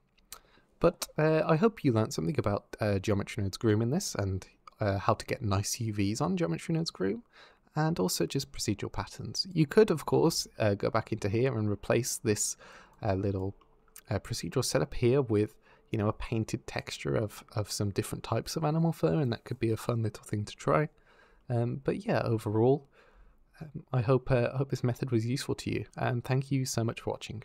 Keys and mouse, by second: 9.4 click, 11.9 click, 12.8 click, 16.6 click.